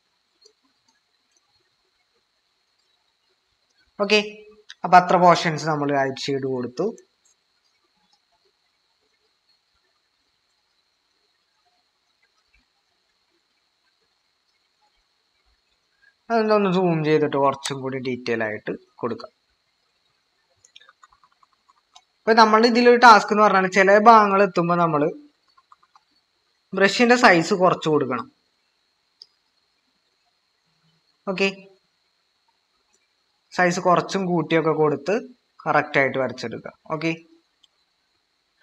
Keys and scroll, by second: 16.7 typing, 20.8-21.8 typing, 25.3-25.8 typing.